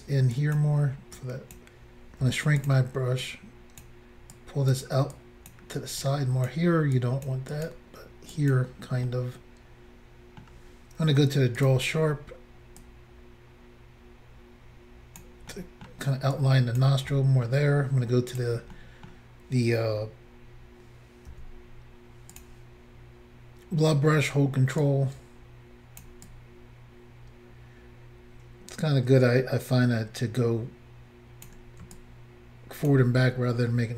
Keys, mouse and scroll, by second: 0.4 click, 1.2 click, 2.3 f, 2.6 click, 2.7 click, 3.3 click, 4.4 click, 5.2 click, 6.0 click, 7.0 click, 7.5 click, 7.7 click, 8.4 click, 8.5 click, 9.1 middle click, 11.6 click, 11.7 click, 12.8 click, 15.5 middle click, 16.4 click, 17.1 middle click, 18.3 click, 18.4 click, 18.8 middle click, 20.1-20.6 scroll up 2, 21.3 f, 22.4 click, 22.5 click, 24.9 ctrl+click, 26.3 ctrl+click, 32.0 ctrl+click, 33.2 ctrl+click, 33.4 middle click.